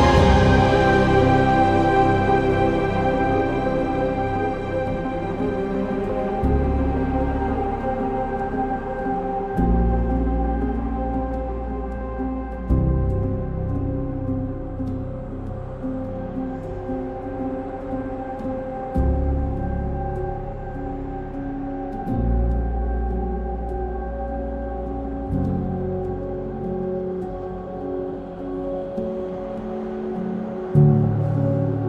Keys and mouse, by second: 0.2 middle drag, 4.4 middle click, 4.8 Tab, 7.8 3, 9.4 3, 11.0 KP_1, 11.2 KP_3, 12.7 2, 13.2 1, 13.8 alt+z, 20.0 g, 21.5 click, 21.8 ctrl+click, 23.8 g, 25.4 ctrl+click, 26.8 g, 27.4 click, 27.8 ctrl+click, 28.7 shift+middle click, 29.8 g, 30.1 z, 30.9 click, 31.4 ctrl+click.